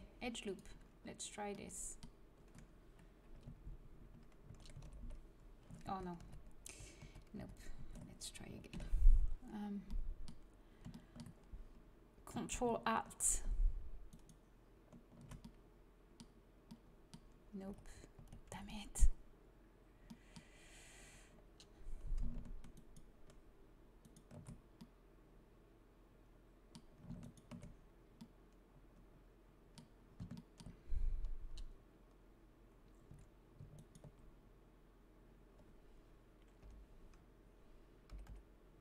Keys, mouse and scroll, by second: 0.9 middle click, 4.4 a, 4.7 alt+h, 5.7 ctrl+z, 6.1 ctrl+z, 6.5 ctrl+z, 7.0 ctrl+z, 7.3 ctrl+z, 7.7 ctrl+a, 8.6 alt+h, 9.1 a, 12.8-15.5 middle drag, 15.6 middle click, 17.6 z, 18.1 z, 18.5 a, 22.7-25.7 right drag, 25.7 click, 25.8 right click, 26.4 middle click, 27.3-28.6 right drag, 28.2 click, 33.0 a, 33.7-36.3 drag, 36.6 l, 38.1 l, 38.5 l.